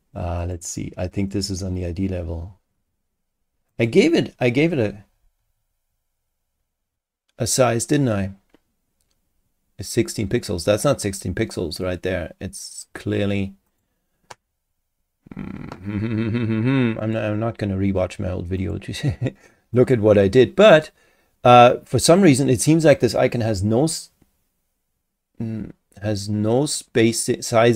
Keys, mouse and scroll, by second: 0.4 click, 1.3 click, 3.7 click, 13.7 click, 17.0 click, 18.6 click, 19.7 click, 22.0 click.